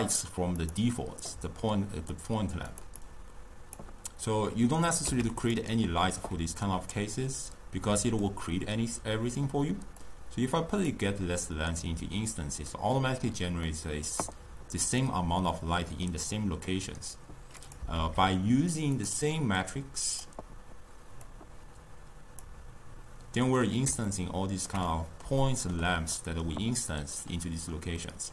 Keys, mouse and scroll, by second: 2.8 click, 3.0-5.1 drag, 5.1 x, 8.3 drag, 10.1 click, 13.7-17.7 middle drag, 17.7 click, 18.7 shift+d, 19.7 drag, 21.3 click, 23.7-28.3 middle drag.